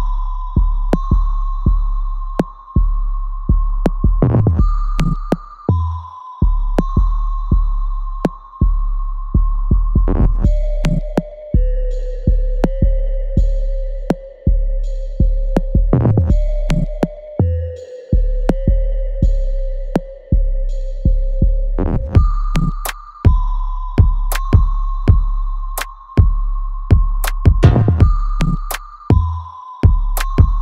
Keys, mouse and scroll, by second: 1.6-5.7 alt+drag, 5.7 alt+right click, 6.0-8.5 alt+drag, 8.5 alt+middle click, 8.9-10.5 alt+drag, 10.5-15.5 alt+drag, 15.5 alt+click, 19.3-23.7 alt+drag, 24.4 alt+click, 27.1 alt+right click, 27.7 alt+click, 28.8-30.6 alt+drag.